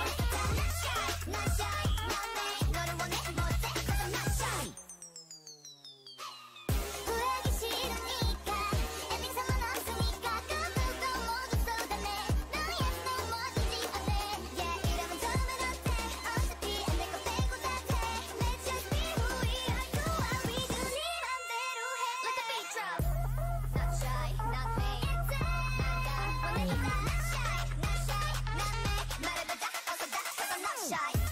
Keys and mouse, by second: 0.3 click, 1.1 a, 1.4 click, 2.7-4.0 drag, 4.0 a, 7.6 a, 8.0 ctrl+Tab, 9.9-11.2 drag, 19.1-22.3 right drag, 19.5-22.2 drag, 22.2 ctrl+z, 22.8 a, 25.1 KP_3, 26.2 k, 29.9 KP_9, 31.2 z.